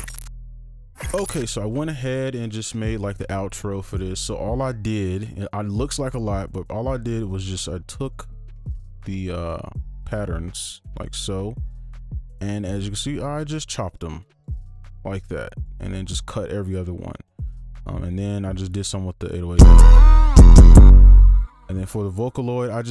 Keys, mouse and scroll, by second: 4.6-6.6 scroll up 1, 7.4 ctrl+click, 8.0 right click, 13.9 shift+click, 14.3 shift+click, 14.7 shift+click, 16.1 right click, 19.5 space, 20.9 space, 22.6 double click.